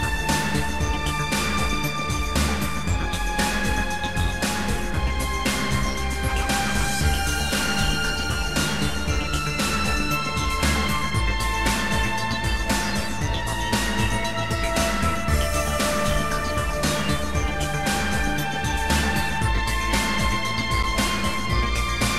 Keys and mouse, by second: 1.2 shift+click, 2.9 shift+click, 4.2 shift+click, 7.1 Delete, 7.1 click, 14.3 click, 15.6 click, 16.9 click, 19.1 shift+click.